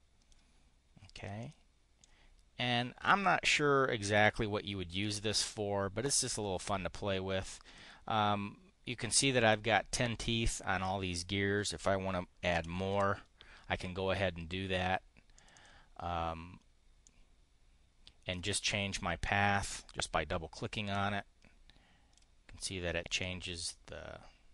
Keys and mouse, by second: 1.0 click, 1.8-3.2 drag, 7.3 click, 12.0-12.9 typing, 15.2 click, 16.9-18.3 drag, 19.1-22.2 drag, 23.1-24.5 drag.